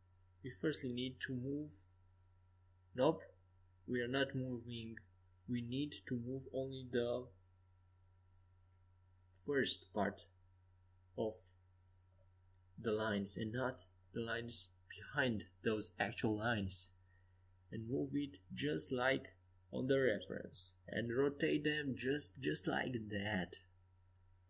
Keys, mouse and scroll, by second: 4.6-5.7 middle drag, 7.1 ctrl+z, 8.5 middle click, 9.3 a, 11.1-14.9 right drag, 14.9 KP_5, 15.1 KP_1, 15.6 KP_3, 16.0 KP_5, 18.1 g, 21.9 r, 24.2 g.